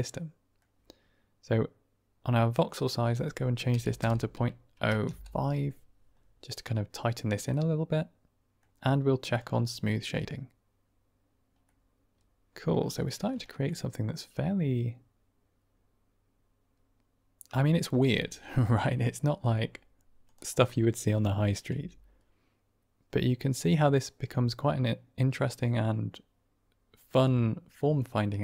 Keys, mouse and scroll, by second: 2.8-6.8 drag, 7.4-8.5 middle drag, 11.6-12.8 middle drag, 12.9 middle drag, 13.4 shift+middle drag, 13.6-17.6 middle drag, 18.2 middle click, 18.5 shift+middle drag, 20.6-20.9 middle drag, 20.9 click, 21.6 r.